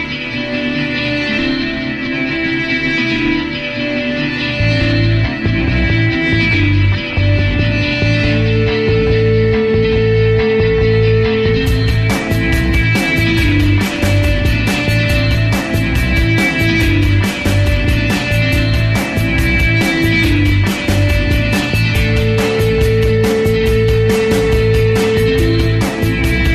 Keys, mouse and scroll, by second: 0.4 f, 0.5 ctrl+click, 0.8 ctrl+z, 0.9 ctrl+click, 1.5 alt+middle click, 1.7 ctrl+click, 2.3 alt+middle click, 2.4-3.8 alt+drag, 3.8 alt+middle click, 3.9 alt+click, 4.1 alt+right click, 4.3 f, 4.6 ctrl+click, 5.2 alt+right click, 5.4 alt+click, 5.5 alt+right click, 5.6 alt+middle click, 5.7 f, 5.9 alt+click, 6.0 f, 6.3 click, 6.5 ctrl+z, 6.9 click, 7.6 ctrl+z, 7.8-9.1 drag, 9.1 alt+middle click, 9.2 alt+click, 9.8 ctrl+z, 9.9 click, 10.3 alt+middle click, 10.5 alt+click, 11.1 ctrl+z, 11.3-13.2 drag, 13.2 alt+middle click, 13.5 click, 14.0 ctrl+z, 14.1-15.5 drag, 15.5 ctrl+z, 15.7-18.0 drag, 18.0 alt+right click, 18.1-19.2 alt+drag, 19.2 ctrl+z, 19.3 alt+click, 19.4 alt+middle click, 19.6 alt+click, 19.8 alt+middle click, 20.0 alt+right click, 20.2 alt+click, 20.4 alt+middle click, 20.5 alt+right click, 20.9 alt+middle click, 21.1 f, 21.3-23.1 ctrl+drag, 23.3 alt+middle click, 23.5 ctrl+alt+click, 24.2 ctrl+z, 24.3-25.8 ctrl+drag, 25.8 ctrl+z, 26.0-26.5 shift+drag.